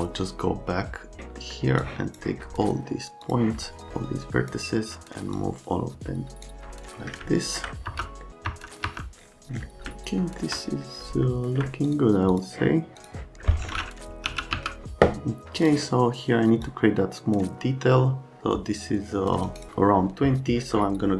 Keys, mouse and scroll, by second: 1.4 scroll up 1, 1.8-2.1 scroll down 1, 3.2 scroll down 1, 3.9 scroll down 1, 4.0 click, 5.4 click, 5.9 click, 7.3 alt+middle click, 7.9 F3, 8.5 F3, 8.8 F3, 9.9 alt+middle click, 11.3 alt+middle click, 11.9 click, 12.3 click, 13.0 click, 13.5 right click, 14.3 f, 14.5 z, 15.6 click, 16.6 click, 19.5 right click.